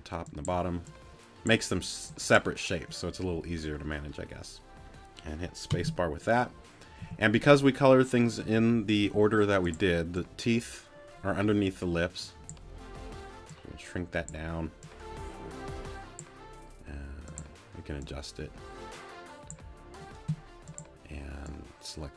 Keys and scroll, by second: 5.7 space, 7.0 t, 9.0 t.